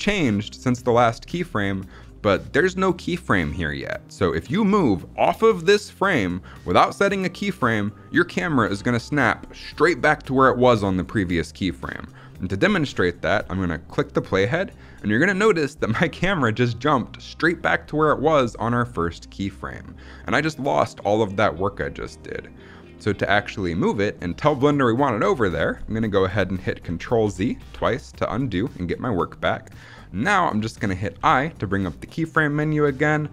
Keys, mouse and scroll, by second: 13.9-14.9 drag, 27.2 ctrl+z, 27.7 ctrl+z.